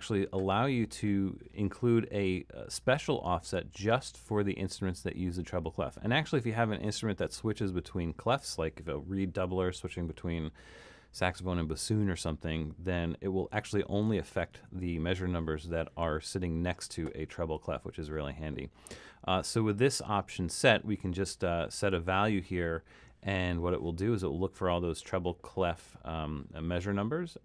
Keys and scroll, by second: 14.7 super+a.